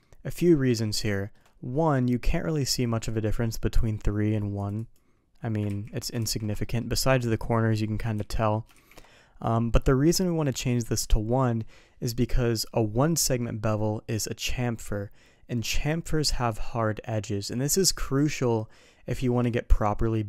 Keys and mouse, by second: 0.4 middle drag, 1.0 shift+middle drag, 1.7 middle drag, 2.2 middle click, 4.5 click, 4.7 click, 5.6 ctrl+z, 6.5 middle click, 9.7 middle drag.